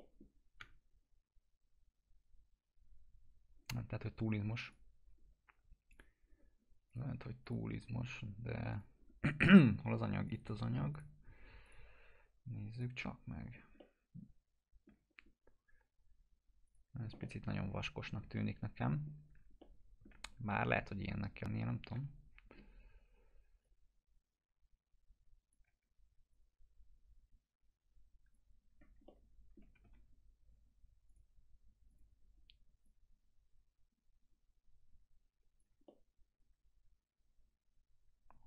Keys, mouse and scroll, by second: 0.5 p, 3.8 scroll up 1, 4.6 click, 10.4 right click, 10.9 click, 13.0 scroll down 1, 13.7-15.0 alt+middle drag, 15.1 scroll up 1, 16.6 click, 17.2-19.2 alt+middle click, 18.3 middle click, 19.5-20.2 alt+middle click, 20.4 e, 22.6 scroll down 1, 23.7-25.9 drag, 25.7 w, 26.4-28.5 drag, 28.6 scroll down 1, 29.1-29.7 alt+middle click, 29.6-30.5 typing, 31.1-35.7 drag, 35.9-38.4 alt+middle drag.